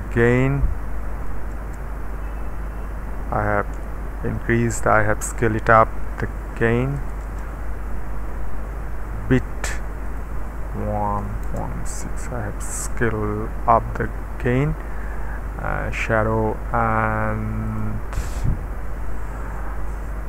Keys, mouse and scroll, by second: 0.0 KP_1, 1.5 Return, 3.7 KP_1, 6.6 ., 6.9 KP_1, 7.2 Return, 10.2 click, 11.2 KP_6, 11.4 Return, 16.1 click, 17.7 click.